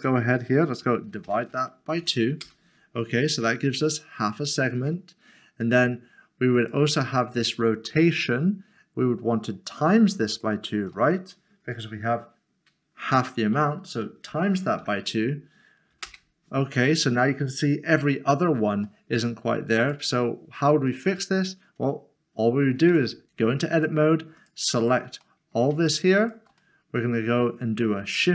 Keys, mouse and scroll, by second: 2.0 typing, 2.4 Return, 3.9 middle click, 5.6 click, 14.0 click, 14.3-14.8 typing, 16.0 Return, 18.8 middle click, 19.8 click, 22.9 click, 23.7 Tab, 24.0 click, 24.4 shift+click, 24.8 shift+double click, 26.6 middle click.